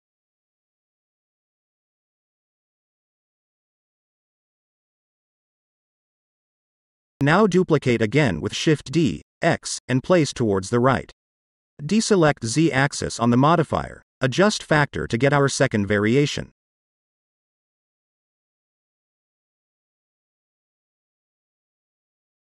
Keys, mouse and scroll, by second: 3.4-4.8 middle drag, 5.0-5.7 scroll down 1, 5.7-7.6 middle drag, 8.6 shift+d, 8.8 x, 9.7 click, 10.1-11.5 shift+middle drag, 11.7 click, 12.8-16.1 drag, 16.5 scroll down 1, 16.7-19.2 middle drag, 18.1-19.2 scroll down 1, 19.2-20.3 drag, 20.7-21.1 middle drag, 21.4 shift+middle click, 22.2 click.